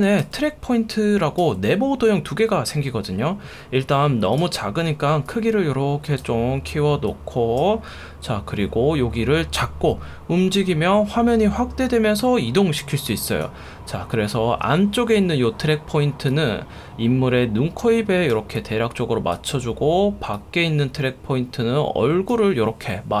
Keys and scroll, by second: 0.2 F1, 1.4 F1.